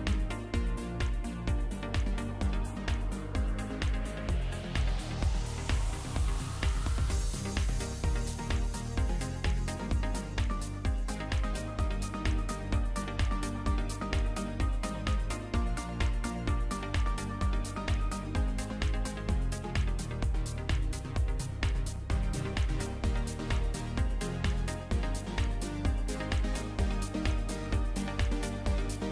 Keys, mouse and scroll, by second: 1.0 scroll up 1, 1.1 middle click, 1.4-1.8 scroll down 2, 1.6 middle click, 2.6-3.1 scroll down 4, 2.8 middle click, 3.1 middle click, 3.2 click, 3.2 scroll up 3, 3.4 click, 4.0 click, 4.7 middle click, 4.8 alt+a, 4.9 middle click, 5.7 click, 5.7 scroll down 3, 5.7 middle click, 6.2 scroll up 1, 6.3 middle click, 7.6 middle click, 8.8 click, 12.6 s, 14.2 alt+a, 14.3 middle click, 14.6 middle click, 14.7 g, 15.4 middle click, 16.3 middle click, 16.3 scroll down 4, 16.4 middle click, 18.3 middle click, 27.6 middle click, 27.6 click, 27.6 scroll up 1, 27.7 g.